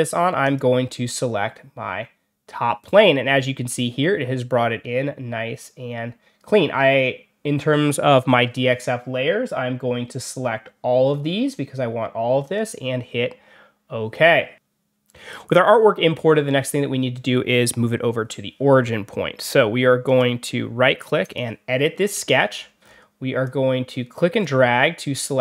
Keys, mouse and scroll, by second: 0.3 click, 11.0-11.4 scroll up 1, 12.3 click, 20.0 right click, 21.1 click, 22.4 scroll down 2, 22.7 scroll up 2, 23.3 click.